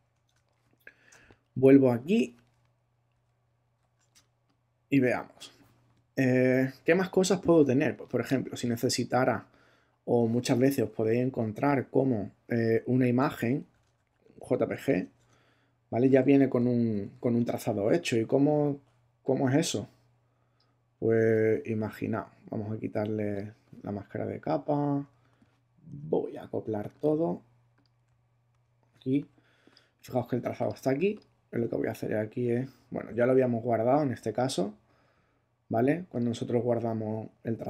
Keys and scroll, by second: 0.2 super+Tab, 3.1 super+-, 4.1 super+space, 5.0 space, 13.1 alt+Tab, 14.1 ctrl+alt+Tab, 15.0 ctrl+Tab, 16.2 ctrl+super+Tab, 16.5 ctrl+super+-, 25.9 shift+super+e, 28.5 shift+super+e.